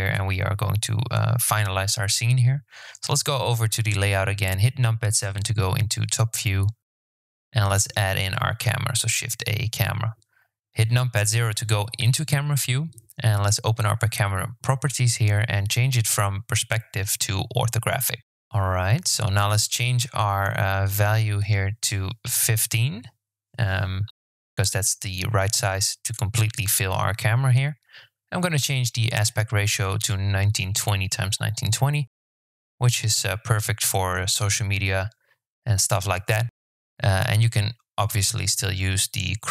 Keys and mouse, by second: 0.0 click, 2.3 KP_7, 4.2 shift+a, 9.1 KP_0, 13.5 click, 16.5-17.6 drag, 18.7-22.0 drag, 22.0 right click, 27.3 click, 28.3-30.4 drag.